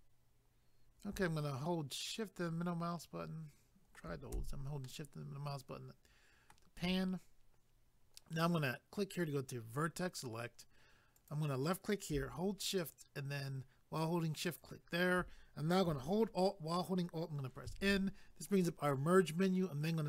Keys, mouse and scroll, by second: 2.0 shift+middle click, 4.8 shift+middle click, 9.2 click, 11.2 click, 14.4 shift+click, 17.7 alt+m.